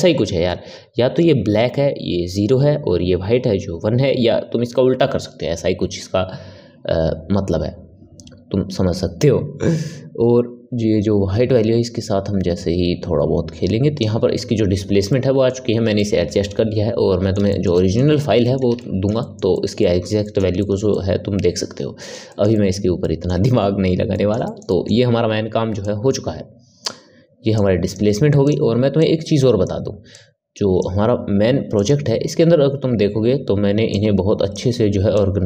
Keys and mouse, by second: 15.0-25.7 ctrl+middle drag, 25.7 click, 27.5 click, 28.4 click, 28.9 click, 30.0 click, 33.8-35.4 drag.